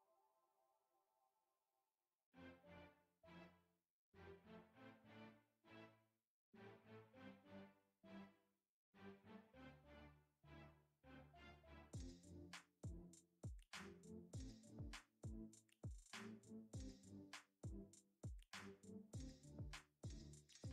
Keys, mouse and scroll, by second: 0.0 middle click, 0.3 shift+middle click, 0.6 middle click, 1.0 shift+click, 1.1 middle click, 1.4 middle click, 1.7 middle click, 2.5 middle click, 3.0 shift+click, 3.2 middle click, 3.6 shift+click, 4.0 middle click, 4.5 middle click, 5.1 middle click, 5.2 middle click, 5.4 middle click, 5.7 middle click, 5.9 ctrl+e, 6.2 middle click, 6.5 middle click, 7.1 Tab, 7.7 middle click, 8.0 middle click, 8.4 click, 8.5 Tab, 8.9 middle click, 9.2 shift+middle click, 9.7 middle click, 10.2 middle click, 10.8 middle click, 11.1 middle click, 11.6 shift+click, 12.0 middle click, 13.1 middle click, 13.5 Tab, 13.8 drag, 14.1 middle click, 14.3 middle click, 14.7 KP_Divide, 14.9 middle click, 15.2 shift+middle click, 15.4 click, 15.9 click, 16.5 click, 17.0 Tab, 17.5 a, 17.6 click, 18.4 u, 18.7 middle click, 18.9 alt+click, 19.1 middle click, 19.4 middle click, 19.8 alt+click, 20.3 middle click.